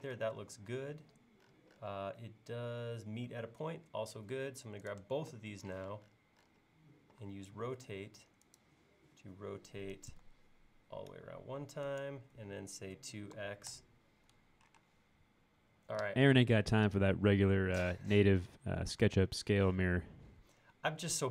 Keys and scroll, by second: 0.2 space, 5.8 q, 13.0-13.4 typing, 14.4-14.8 typing.